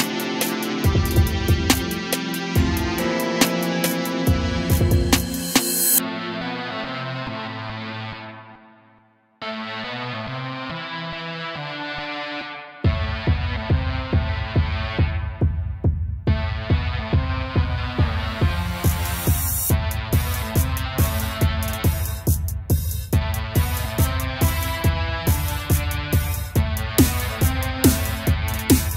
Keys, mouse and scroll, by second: 2.4 g, 6.9 shift+d, 7.3 g, 12.7 click, 16.3 g, 19.9 g, 21.4 g, 23.6 g, 26.7-28.9 drag.